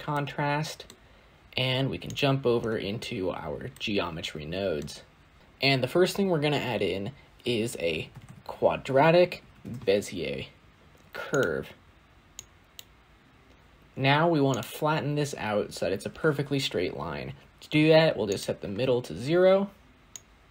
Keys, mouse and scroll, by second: 0.0-0.8 middle drag, 0.8-1.9 scroll up 3, 1.9 click, 3.7-4.7 middle drag, 4.7 scroll up 1, 4.8-5.4 scroll down 1, 5.4-9.5 drag, 12.6 click, 13.7-18.0 scroll up 6, 18.2 click.